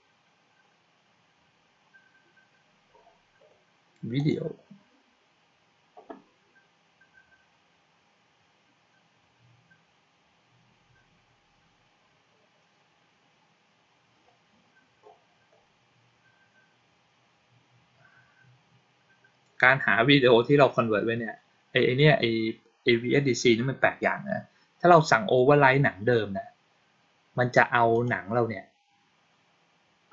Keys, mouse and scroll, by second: 4.0 click, 27.8 click.